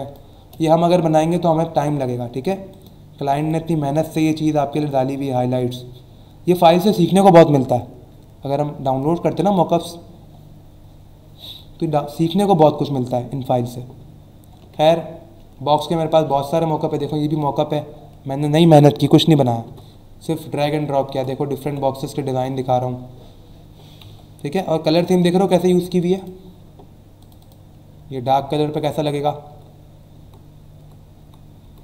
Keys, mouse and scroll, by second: 1.0-1.5 alt+scroll down 2, 2.7 click, 3.3 click, 4.8 click, 6.1-6.5 scroll down 1, 7.8-8.1 scroll down 1, 11.6-12.0 scroll down 1, 12.2-12.8 scroll up 1, 13.4 scroll up 1, 14.7 alt+Tab, 16.3 click, 26.1 click, 27.2 click, 29.5 Right.